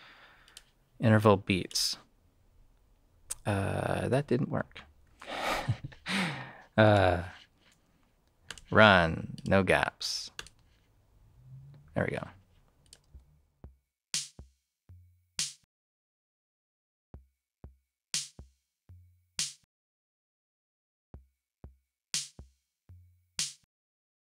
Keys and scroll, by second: 5.0 super+z, 13.0 space.